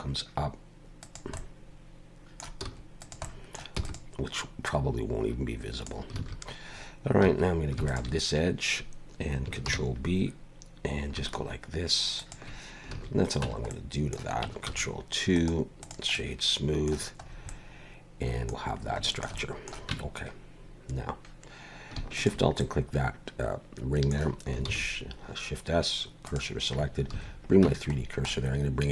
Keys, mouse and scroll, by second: 1.3 middle click, 2.6 s, 3.2 middle click, 3.7 e, 4.6 click, 6.2 alt+a, 7.2 2, 7.9 alt+shift+click, 9.7 ctrl+b, 12.9 alt+a, 13.4 Tab, 13.7 middle click, 14.7 ctrl+2, 15.3 right click, 16.1 middle click, 17.2 scroll up 3, 17.5 middle click, 18.6 scroll down 2, 19.0 shift+middle click, 19.4 middle click, 19.9 Tab, 22.2 alt+shift+click, 22.6 middle click, 24.7 shift+s, 27.1 alt+a, 27.6 Tab, 28.0 scroll down 2, 28.3 middle click.